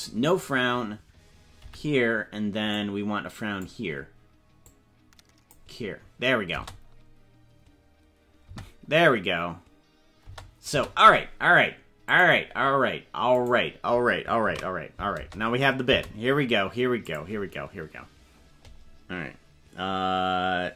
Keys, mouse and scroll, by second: 2.7 click, 4.8 click, 6.4 space, 8.6 space, 10.2 space, 10.8 space, 12.0 click, 13.3 right click, 14.4 ctrl+s, 15.1 space, 15.8 space, 17.0 click.